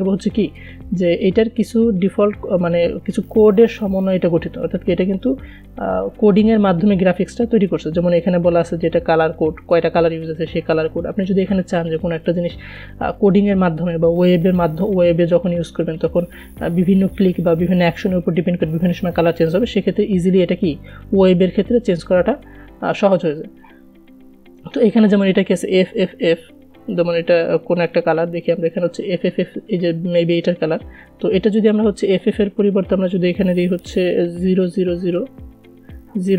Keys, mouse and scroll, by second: 0.7 scroll up 1, 10.2 click, 12.8 scroll down 1, 14.9 scroll up 1, 21.4-28.8 drag, 32.5 click.